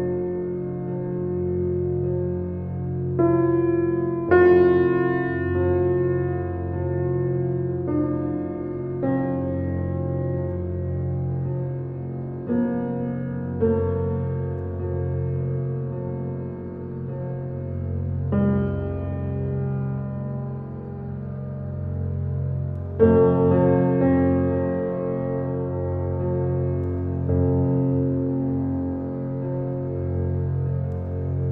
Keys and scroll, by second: 0.5 shift+space, 7.1 ctrl+d, 13.5 Right, 13.8 -, 14.2 3, 14.5 Return, 26.7 u.